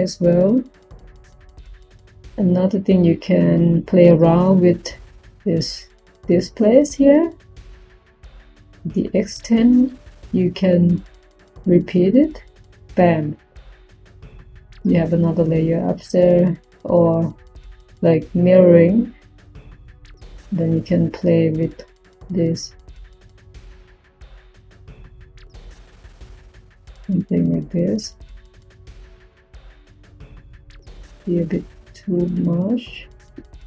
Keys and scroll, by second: 1.2-2.1 typing.